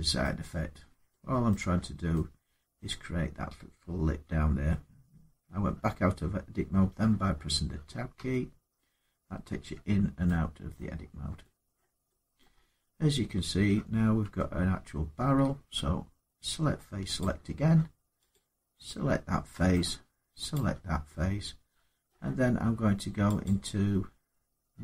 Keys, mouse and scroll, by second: 0.0 middle click, 0.6 scroll, 1.3 middle click, 1.4 Tab, 2.6 middle click, 7.5 Tab, 7.9 Tab, 8.9 Tab, 9.3 Tab, 10.6 middle click, 10.8 scroll, 11.5 middle click, 11.5 scroll down 4, 12.2 middle click, 12.5 Tab, 13.5 Tab, 14.1 Tab, 17.0 click, 18.1 click, 19.5 middle click, 20.3 shift+click, 21.8 middle click, 23.2 click.